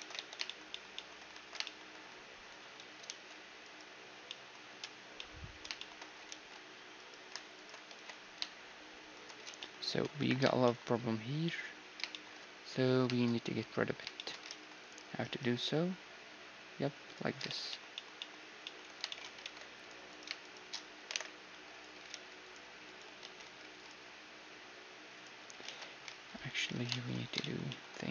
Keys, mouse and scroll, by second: 0.4 click, 1.2-3.0 middle drag, 2.4 a, 2.6 ctrl+r, 3.4-5.5 right drag, 3.9 click, 4.8-7.5 middle drag, 6.7 ctrl+r, 6.7 click, 7.1-9.0 right drag, 7.5 ctrl+b, 9.1 ctrl+z, 9.2-16.6 middle drag, 9.8 KP_1, 14.1 ctrl+r, 16.9-19.7 middle drag, 19.0 ctrl+Tab, 19.7-20.7 drag, 20.7 alt+m, 20.7-22.4 right drag, 21.7 ctrl+r, 22.8 ctrl+z, 23.2 ctrl+r, 25.0 middle click, 25.2 ctrl+z, 25.7 ctrl+r, 26.3-28.1 right drag, 26.3 a, 26.5-28.1 drag.